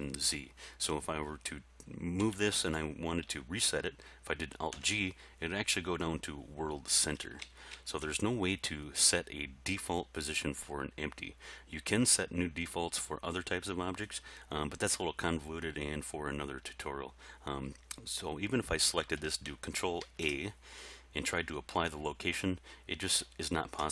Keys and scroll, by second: 2.2 g, 4.7 alt+g, 7.4 ctrl+z, 20.0 ctrl+a, 23.6 ctrl+z.